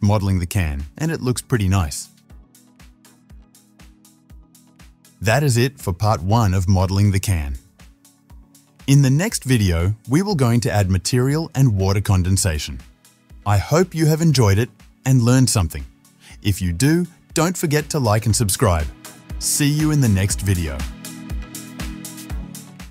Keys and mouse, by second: 0.0-1.4 drag, 1.4-6.2 middle drag, 6.2-6.8 drag, 6.8-7.4 right drag, 7.4-13.7 middle drag, 13.7-22.4 drag.